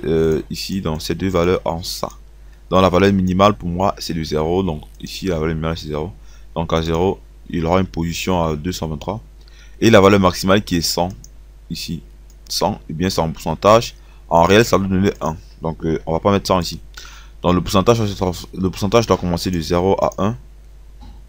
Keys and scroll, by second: 16.2 1.